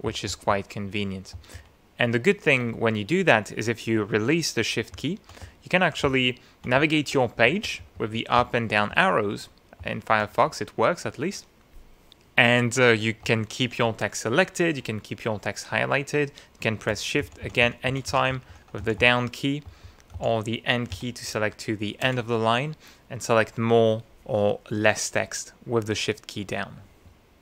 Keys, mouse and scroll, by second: 1.3 ctrl+shift+Down, 4.9 Down, 5.1 scroll down 2, 5.5 Up, 5.6-6.1 scroll up 4, 6.1-6.6 scroll down 2, 6.8 Up, 7.0-7.5 scroll up 2, 8.4 Down, 8.9 Up, 9.8 Down, 13.2 Up, 17.2 shift+Down, 18.3 shift+Up, 18.8 shift+Down, 19.6 shift+Up, 20.1 shift+Down, 20.9 shift+End.